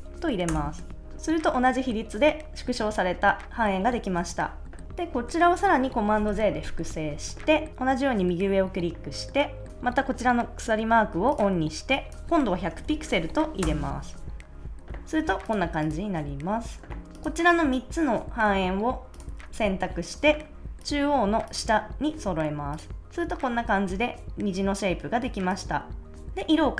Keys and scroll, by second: 0.4 Return, 6.1 super+j, 12.4-13.3 typing, 13.6 Return.